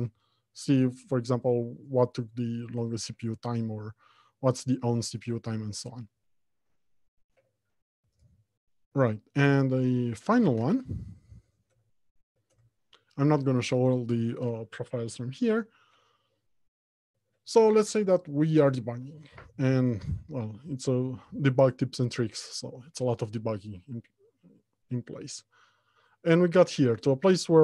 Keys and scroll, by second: 10.6 alt+Home, 11.1 Left, 13.0 Return.